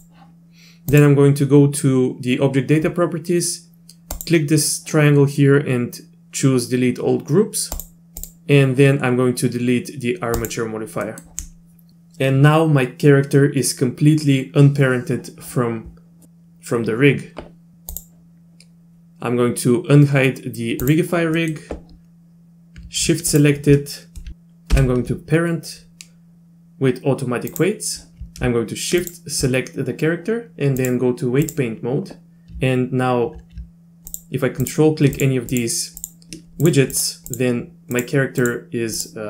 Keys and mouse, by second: 4.1-7.8 drag, 11.0 middle click, 17.9 click, 20.9 click, 21.4 middle click, 23.3 shift+click, 24.7 ctrl+p, 29.0 shift+click, 30.9-31.5 drag, 34.1 ctrl+click, 35.2 ctrl+click, 35.5 ctrl+click, 37.0 ctrl+click, 37.3 ctrl+click, 38.0 ctrl+click, 39.0 ctrl+click.